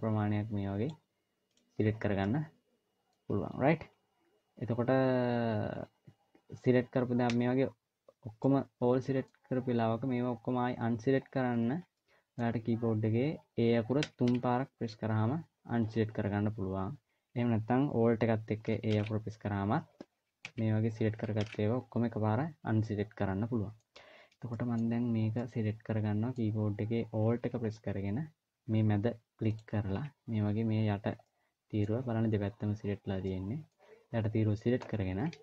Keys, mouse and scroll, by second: 2.0 middle click, 7.0 a, 8.2 middle click, 11.1-11.7 scroll down 3, 11.7 middle click, 13.8 a, 14.0 a, 18.7 alt+a, 20.2 a, 21.1 alt+a, 22.4 scroll up 1, 22.6 middle click, 23.8-24.1 scroll up 1, 24.3 middle click, 24.7-25.1 scroll up 1, 25.1 middle click, 29.3 alt+click, 31.1 middle click, 33.1 middle click.